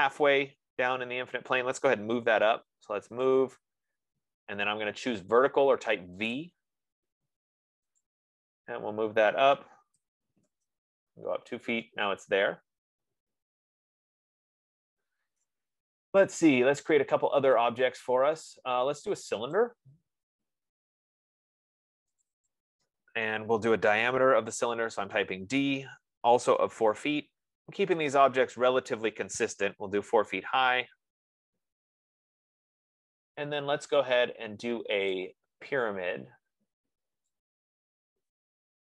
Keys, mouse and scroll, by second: 0.7 click, 2.3-3.5 typing, 6.0 F15, 6.8-8.5 drag, 10.4-11.0 typing, 15.8-17.9 right drag, 17.9-19.7 drag, 22.7 click, 24.5 d, 24.7 Return, 26.5-27.4 typing, 26.9 click, 30.1 typing, 30.3 Return, 35.6 click, 37.9 click.